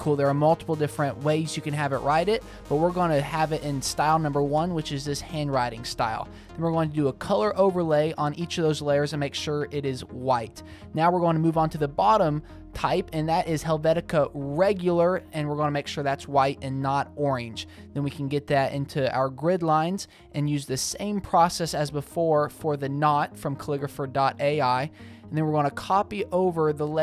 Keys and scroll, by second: 0.3 super+v, 1.1 shift+super+v, 8.2-9.9 typing, 10.0 super+a, 17.2 Escape, 17.5 v, 18.5 shift+super+t, 19.8 shift+Return, 21.1 shift+super+Tab, 21.8 super+v, 24.3 Left, 24.6 Down, 25.5 t, 26.4 Escape, 26.8 super+a.